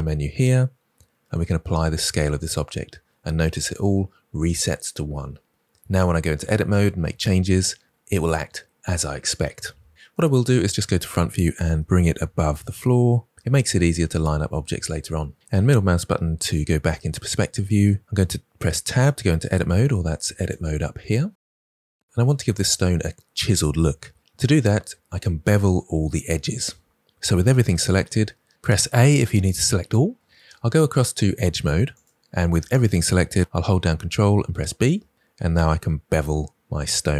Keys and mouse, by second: 10.4 KP_1, 11.6 g, 12.1 z, 19.1 Tab, 20.6-21.7 drag, 31.9 click, 34.4 ctrl+b.